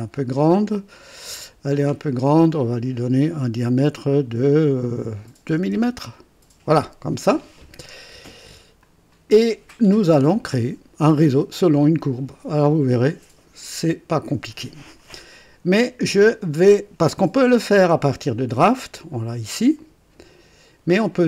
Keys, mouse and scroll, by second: 1.8 click, 5.4 KP_2, 5.7 KP_Enter, 8.8 click, 16.3 click, 18.1 click, 19.7 click.